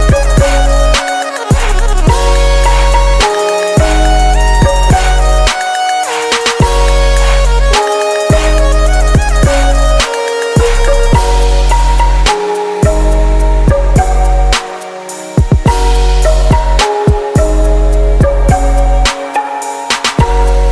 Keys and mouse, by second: 14.3-15.7 drag, 15.1-17.7 middle drag, 17.7-19.7 right drag, 20.3 click.